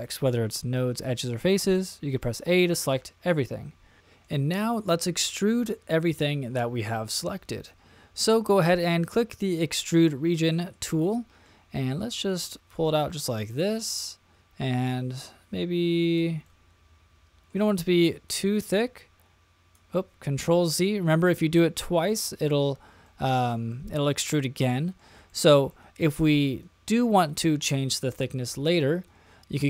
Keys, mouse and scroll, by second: 4.0 middle click, 9.4 click, 10.3 middle click, 11.1 middle click, 12.3-16.2 drag, 16.4-17.5 middle drag, 18.2-19.7 drag, 20.7 super+z, 23.0 middle click, 24.7 middle click, 25.3 shift+middle click, 27.7-28.8 middle drag.